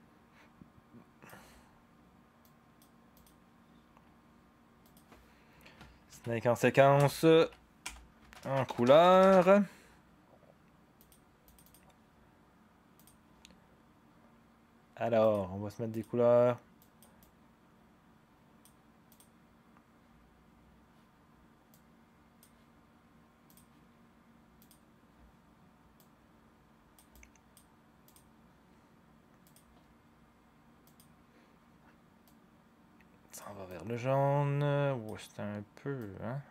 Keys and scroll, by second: 6.1 ctrl+d, 6.9 Return, 7.3 Right, 7.8-9.3 typing, 13.3-14.0 typing.